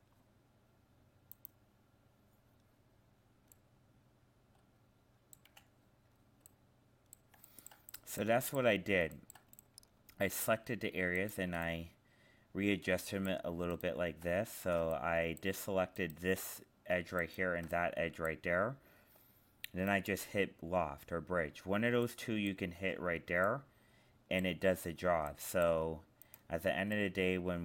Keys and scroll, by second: 14.5 ctrl+z.